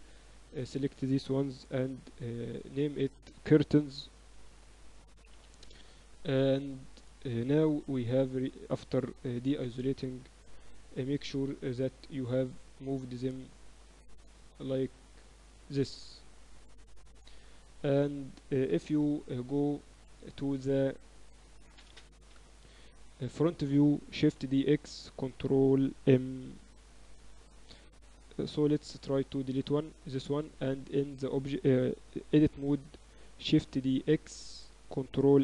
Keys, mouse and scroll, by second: 0.0 z, 0.2 middle click, 2.0 ctrl+Up, 7.9 KP_Divide, 8.4 z, 9.1 KP_1, 10.3 KP_7, 10.4 z, 12.6-14.5 drag, 17.5-20.4 middle drag, 18.9 KP_1, 22.4 ctrl+Up, 24.2 shift+d, 26.3 x, 28.5 x, 30.2 Tab, 30.5 a, 31.6 a, 33.5 shift+d.